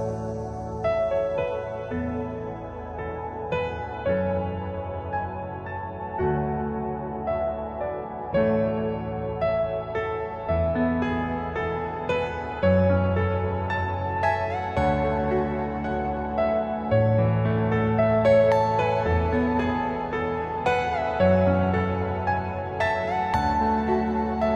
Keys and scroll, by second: 2.1-3.0 typing, 6.1 space, 6.3 Escape, 7.7 ctrl+z, 13.6 ctrl+g, 13.9 F4, 15.8 t, 16.4 l, 17.6 Escape, 17.7 F2.